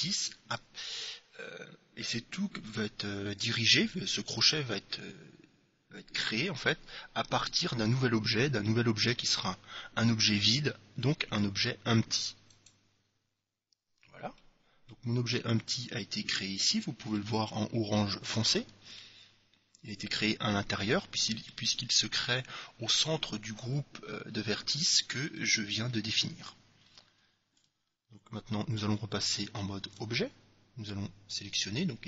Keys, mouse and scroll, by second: 14.5-16.3 middle drag, 16.9-18.8 middle drag, 19.1-20.9 middle drag, 21.1-22.9 middle drag, 24.9-26.4 middle drag, 26.6 middle click, 30.0 Tab.